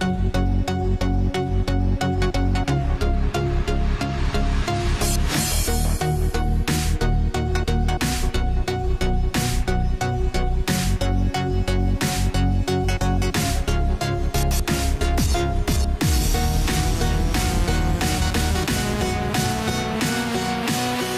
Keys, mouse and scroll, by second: 0.9 shift+Num_Lock, 0.9 click, 1.2-9.3 shift+drag, 10.9 click, 13.2 right click, 13.7 click, 17.3 ctrl+t.